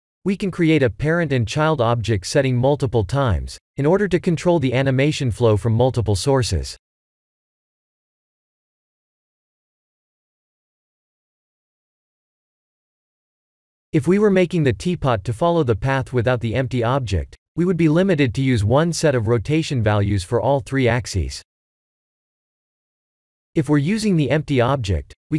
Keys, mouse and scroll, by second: 0.7 click, 1.6 shift+click, 2.9 ctrl+p, 8.3 click, 12.4 click, 20.4 click, 25.1 click.